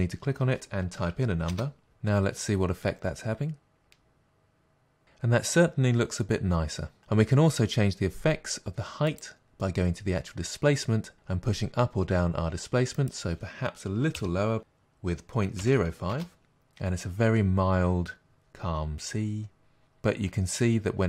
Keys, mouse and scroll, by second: 1.6 Return, 10.4 space, 16.2 Return.